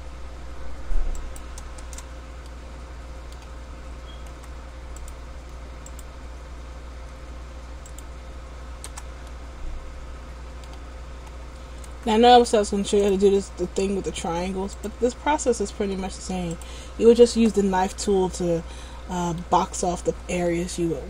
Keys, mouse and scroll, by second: 2.7 middle click, 4.5 k, 9.5 middle click, 12.0 k, 18.0 middle click.